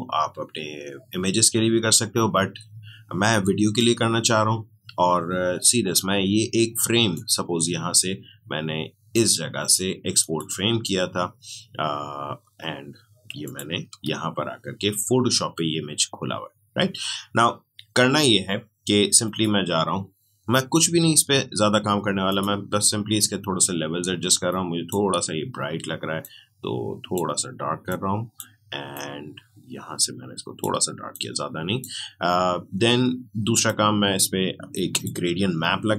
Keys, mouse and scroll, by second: 3.7-9.5 drag, 10.2 click, 13.4 click, 19.2 click, 22.2-33.5 drag.